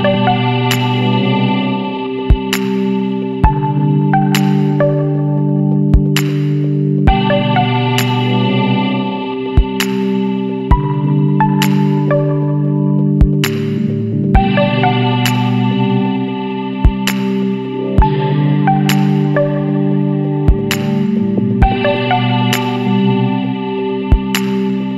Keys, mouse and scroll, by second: 0.2 scroll up 1, 0.5-4.6 shift+middle drag, 4.6 ctrl+s, 4.9 middle drag, 5.1 scroll up 1, 5.4 click, 5.7 middle click, 6.0 scroll up 1, 6.1 click, 6.5-6.8 scroll up 1, 8.3-10.9 drag, 10.9 Tab, 11.1 middle click, 11.7 alt+a, 12.1 alt+shift+click, 12.7 KP_Decimal, 14.1 click, 14.7 KP_Decimal, 15.5 scroll down 3, 15.9-16.4 middle drag, 16.4 alt+a, 16.7 alt+shift+click, 17.1-17.5 scroll up 1, 17.5 ctrl+b, 20.5 Tab, 20.6 scroll down 2, 20.7-21.7 middle drag, 21.7-22.3 scroll up 1, 22.3 middle drag, 22.6-23.2 scroll up 2, 22.6 Tab, 23.2-24.0 middle drag, 24.0 ctrl+z, 24.2 ctrl+z.